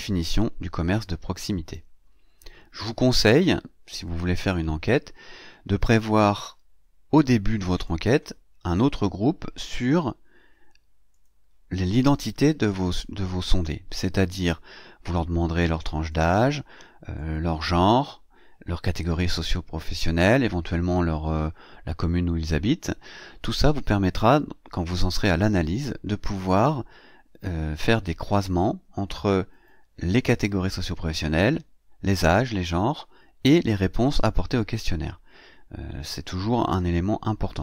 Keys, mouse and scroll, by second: 2.4 ctrl+c, 4.3 click, 5.7 click, 6.2 ctrl+v, 7.6 click, 11.0 click, 15.9 click, 17.0 click.